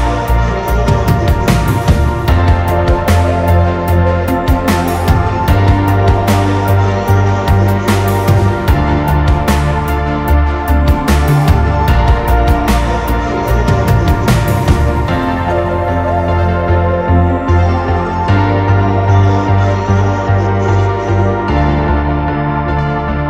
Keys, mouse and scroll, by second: 0.0 m, 1.7 scroll down 1, 1.9 scroll up 1, 2.4 middle click, 5.3 scroll up 1, 5.6 middle click, 7.6-8.1 scroll up 2, 8.0 middle click, 9.0 typing, 11.5 scroll down 1, 12.3 typing, 12.3 double click, 12.8 right click, 13.9 double click, 14.9-15.6 scroll down 1, 15.6 p, 17.0 scroll down 1, 17.2 middle click, 17.5 scroll up 1, 17.7 middle click, 18.0 scroll down 1, 18.2 scroll up 1, 18.3 middle click, 18.7 scroll down 1, 18.9 scroll up 1, 19.0 middle click, 19.5 scroll up 1, 19.8 scroll down 1, 20.4 right click, 22.7 middle click, 23.1 scroll up 1.